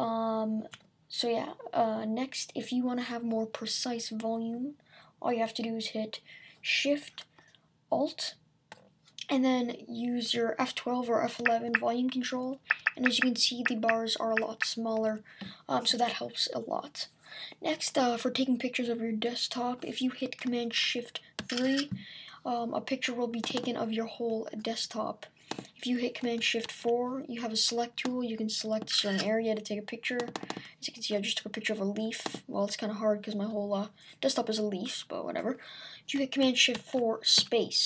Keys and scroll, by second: 21.4 shift+super+3, 26.6 shift+super+4, 36.7 shift+super+4.